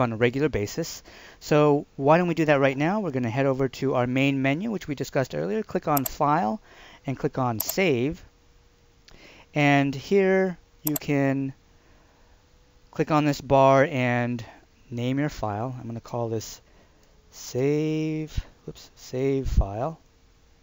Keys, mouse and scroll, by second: 5.9 click, 10.8 click, 15.5 typing, 17.1-19.9 typing.